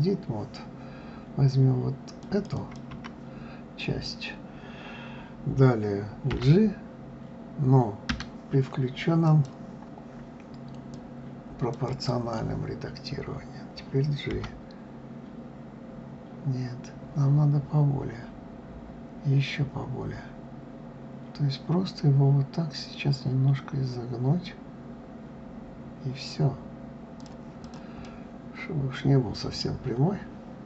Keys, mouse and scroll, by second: 2.2 click, 2.5 click, 9.3 click, 10.9 click, 11.0 right click, 11.9 click, 14.3 g, 27.6 click, 28.0-30.6 middle drag.